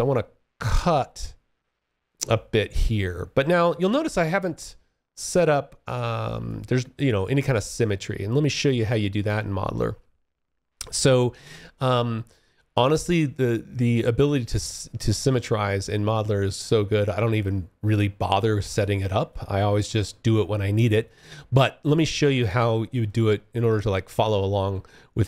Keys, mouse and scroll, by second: 2.8 alt+click, 3.4 alt+middle click, 5.5 alt+click, 6.2 alt+middle click, 7.4 alt+middle click, 13.6 alt+click, 14.4 alt+middle click, 15.0 alt+click, 15.6 alt+middle click, 17.9 alt+click, 18.6 alt+middle click, 20.1 alt+click, 22.2 alt+click, 23.1 alt+middle click.